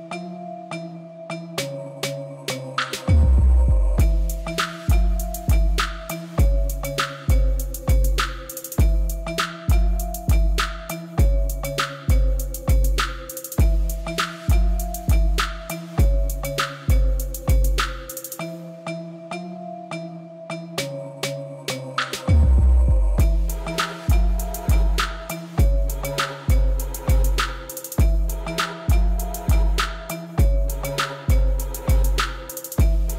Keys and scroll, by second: 0.2 shift+z, 1.0 ctrl+z, 1.6 shift+z, 3.1 shift+z, 3.6 ctrl+z, 4.1 shift+z, 4.7 Tab, 5.0 alt+a, 6.3 Tab, 7.5-8.9 typing, 9.7 Tab, 11.5 s, 11.5 z, 11.9 Tab, 14.1 Tab, 14.5 shift+z, 14.8 b, 15.2 b, 15.8 shift+z, 16.9 Tab, 18.5 Tab, 19.5 shift+d, 20.7 s, 23.1 shift+z, 23.4 b, 23.8 shift+z, 25.5 b, 26.0 shift+z, 26.5 b, 27.1 shift+z, 28.5 shift+z, 29.2 shift+z, 29.9 Tab, 31.7 space.